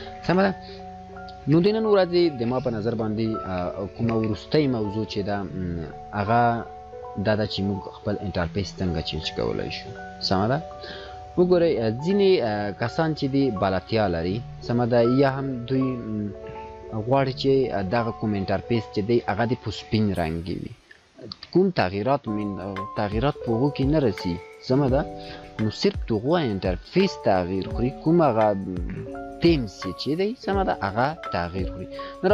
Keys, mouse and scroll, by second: 4.6-32.3 drag.